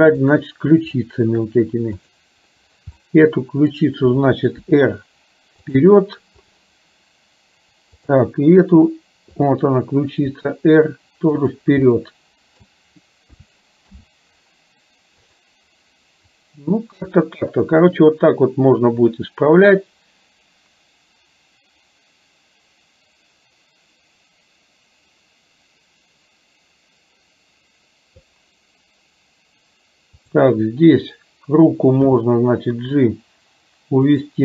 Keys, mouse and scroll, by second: 0.4 drag, 0.9-1.6 middle drag, 3.1-3.8 middle drag, 4.8 r, 9.4 click, 10.4 r, 11.9 middle click, 13.4 a, 14.1 i, 15.4 click, 17.3-28.3 drag, 30.2 click, 32.2 g.